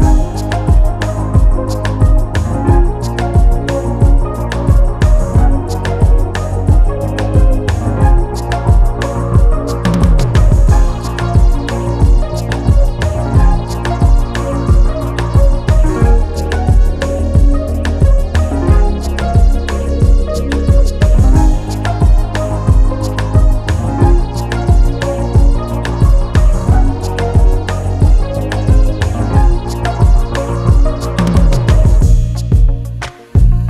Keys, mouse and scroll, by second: 0.3-2.2 drag, 2.7-4.2 drag, 5.7-11.9 drag, 22.5 Left, 22.5-25.5 drag, 25.2 Left, 27.5 n, 28.5 n, 29.3-30.9 drag, 31.0 n, 31.2 click, 32.2 click, 32.8 scroll up 2, 33.0 scroll down 1.